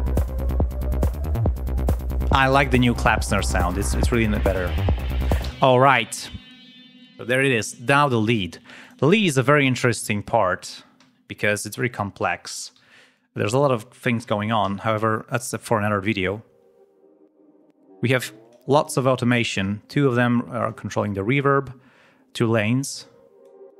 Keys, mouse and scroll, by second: 1.1 click, 1.7 scroll down 1, 2.4 scroll down 2, 3.3 scroll down 2, 4.7 ctrl+scroll down 2, 5.4 ctrl+space, 8.7 click, 9.5 click, 12.7 r, 13.1 click, 14.5 l, 15.7 ctrl+scroll up 2, 22.9 click.